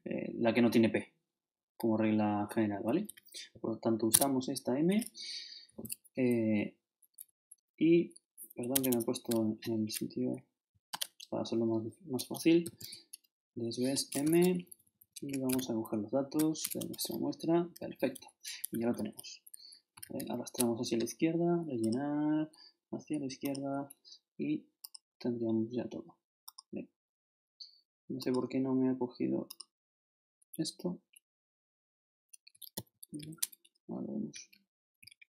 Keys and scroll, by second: 2.9 shift+Up, 4.1 shift+Tab, 7.2 shift+Down, 8.7 shift+Escape, 9.1 shift+Right, 10.9 shift+0, 12.4-13.3 typing, 14.2 shift+Tab, 14.5 shift+Down, 15.5 shift+super+Down, 16.3 shift+super+Up, 16.8 shift+Return, 17.8 shift+Up, 20.0 shift+Left, 32.7 shift+super+c, 33.2 shift+super+Left, 34.0 shift+Left.